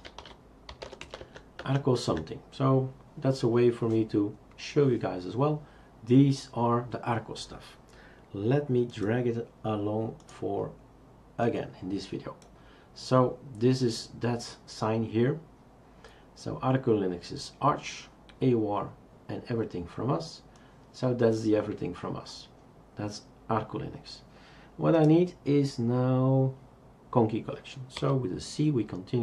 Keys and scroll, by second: 0.0-1.5 typing, 1.6 Tab, 2.1 Tab, 28.0 typing.